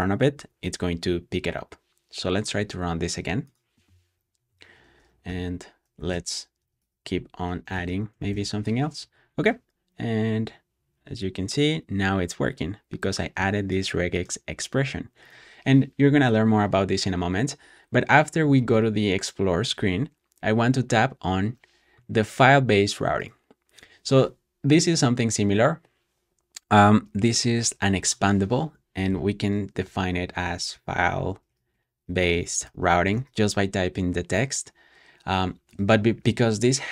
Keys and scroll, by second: 1.0 Return, 4.3 Escape, 5.1-8.2 typing, 18.5 shift+', 29.8-33.6 typing.